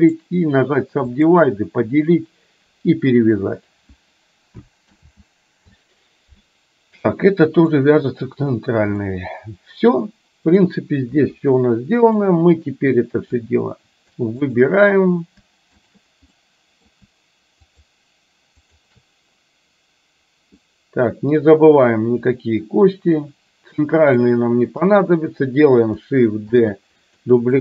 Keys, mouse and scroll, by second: 5.0 ctrl+z, 7.7 middle click, 9.1-10.7 middle drag, 11.2 KP_1, 12.3-13.5 drag, 14.5 shift+click, 15.8 shift+click, 16.5 middle click, 17.7 shift+click, 18.7 shift+click, 20.6-24.2 middle drag, 24.8 KP_1, 26.6 shift+d.